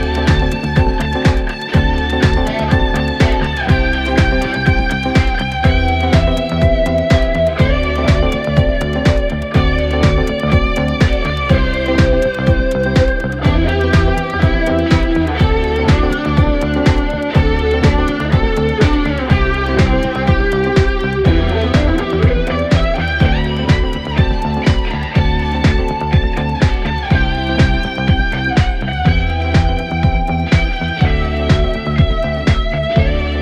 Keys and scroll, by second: 0.0 F1, 3.7 F9, 6.1 ., 20.2 3, 20.9 ].